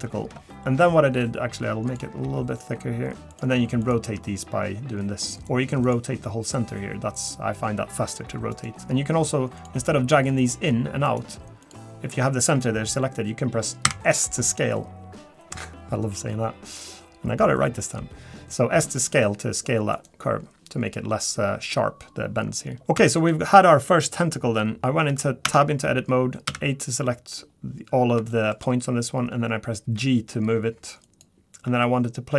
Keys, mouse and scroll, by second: 0.5 shift+middle click, 0.5 scroll down 1, 0.5 KP_7, 1.2 scroll down 3, 1.9 click, 2.2 g, 3.8 click, 4.0 r, 5.8 click, 6.5 r, 9.6 click, 10.1 g, 11.6 click, 23.0 Tab, 23.2 click, 24.8 scroll down 2, 25.4 Tab, 26.5 a, 28.3 shift+middle click, 29.8 g, 31.6 r.